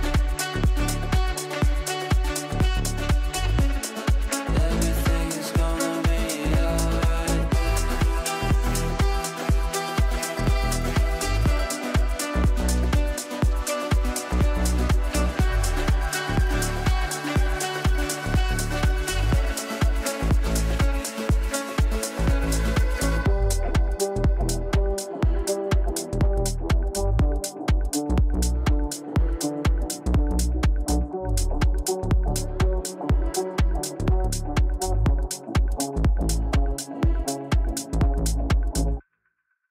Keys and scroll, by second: 3.1 Delete.